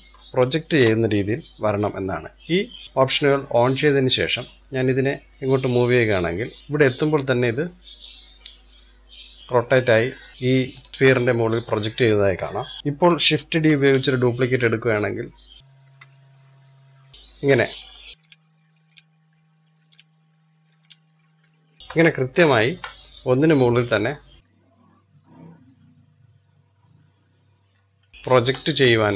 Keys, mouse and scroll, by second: 2.8-5.3 drag, 10.3-13.8 middle drag, 13.8 shift+d, 16.0-17.2 middle drag, 18.2 shift+d, 18.9 shift+d, 19.4-20.0 middle drag, 20.0 shift+d, 20.5-20.8 middle drag, 20.8 shift+d, 21.6-22.6 middle drag, 22.6 shift+d, 24.4-26.0 middle drag, 27.9 scroll up 1, 28.1-28.7 shift+middle drag, 28.7-29.1 scroll down 1.